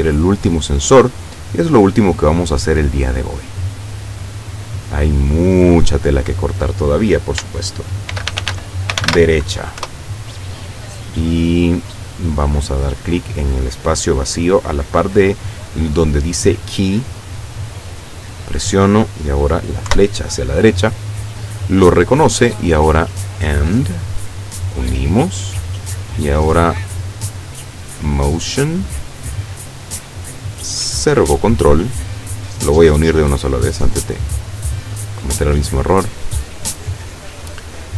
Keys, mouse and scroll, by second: 1.1 click, 3.4 click, 5.1 click, 8.2-9.2 typing, 9.8 Return, 18.3 click, 19.9 Right, 22.3 click, 22.9 click, 24.0-25.2 drag, 26.3 click, 28.7 click, 30.0 click, 31.1 click, 32.3-33.6 drag, 35.1-36.1 drag, 36.9-37.9 drag.